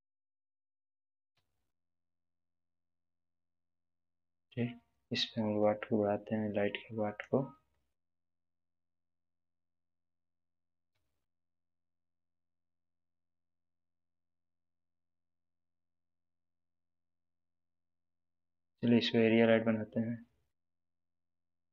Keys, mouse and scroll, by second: 0.7 g, 1.3 z, 2.3 click, 3.0-4.2 middle drag, 5.6-7.5 drag, 7.7-8.3 middle drag, 10.2-11.4 typing, 15.8 click, 18.3 click.